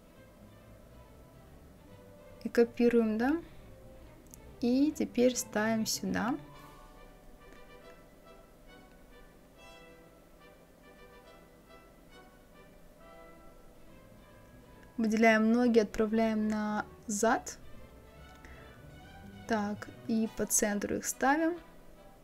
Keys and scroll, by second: 19.1 Left, 21.2 Right.